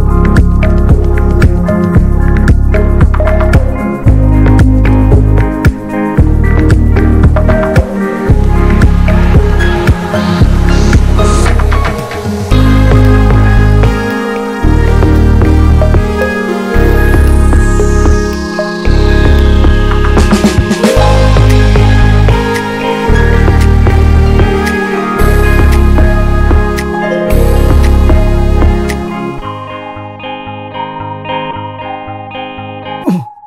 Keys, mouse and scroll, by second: 0.5 alt+middle click, 0.7 alt+z, 1.0 alt+z, 1.2 shift+middle click, 1.4 s, 2.1 scroll up 4, 2.3 s, 3.2 s, 4.3 1, 4.4 click, 4.8 s, 5.9 click, 6.3 s, 7.5 Tab, 7.5 scroll down 1, 7.7 middle click, 8.0 ctrl+a, 8.7 Tab, 8.9 alt+middle click, 10.2 click, 10.5 l, 11.0 alt+middle click, 11.5 click, 12.8 alt+middle click, 13.4-13.7 scroll down 5, 13.7 Tab, 13.9 click, 14.0 scroll up 1, 14.3 ctrl+s, 14.4 Tab, 14.6-15.6 scroll up 2, 14.7 shift+middle click, 15.6 ctrl+r, 16.6 ctrl+r, 17.8 ctrl+r, 19.2 middle click, 19.9 click, 20.1-23.3 typing, 21.0 click, 22.6 click, 23.5-24.5 drag, 24.5 ctrl+z, 24.7 middle click, 25.0-25.4 scroll up 2, 25.4 alt+z, 25.5 middle click, 25.8 click, 26.2 scroll down 1, 26.3 middle click, 26.9 alt+z, 27.1 middle click, 27.6 click, 27.9 ctrl+z, 28.3 p, 28.7 Tab, 28.9 click, 29.0 scroll down 2, 29.1 middle click, 29.8 click, 30.1 ctrl+a, 30.4 ctrl+s, 30.9 click, 31.3 ctrl+s, 31.5 scroll up 2, 31.7 click, 31.9 Tab, 32.0-32.5 scroll up 3, 32.5-33.4 drag.